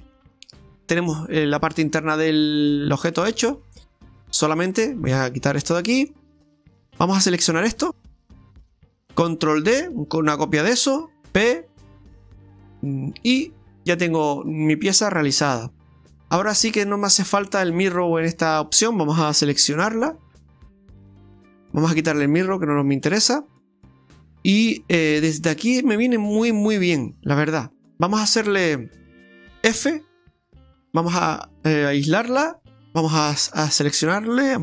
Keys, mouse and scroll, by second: 0.8 middle click, 0.8 scroll up 1, 1.9 Tab, 2.2-3.0 scroll up 3, 3.1 middle click, 3.8-4.7 scroll up 4, 5.4 click, 5.9 middle click, 7.6 alt+shift+right click, 7.8 alt+shift+right click, 8.3 middle click, 9.7 shift+d, 11.5 p, 14.1 middle click, 19.6 Tab, 20.3 right click, 20.8 right click, 22.5 click, 24.6-25.3 scroll down 2, 25.3 middle click, 26.5-27.1 scroll down 4, 27.1 middle click, 29.5 Tab, 29.7 f, 30.4 Tab, 30.9 f, 31.5 Tab, 31.5-32.1 scroll up 5, 32.7 Tab, 33.5 a.